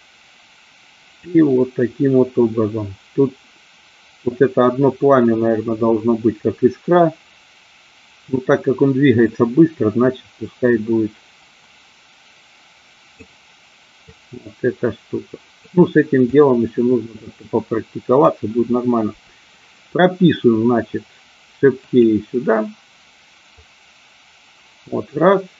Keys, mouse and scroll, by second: 9.4-13.4 drag, 14.1-15.8 drag, 16.4-18.4 drag, 21.9 click, 23.6-25.5 drag.